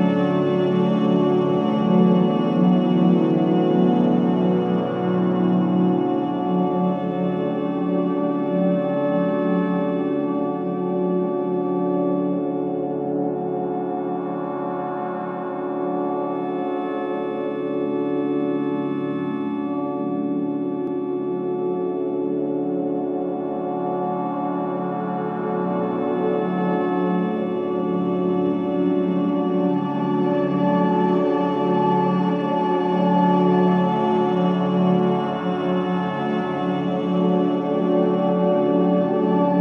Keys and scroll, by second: 16.3 ctrl+z, 21.3 ctrl+z, 22.0 ctrl+z, 22.8 ctrl+shift+z, 24.8 ctrl+z, 27.9 ctrl+shift+z, 32.4 ctrl+z.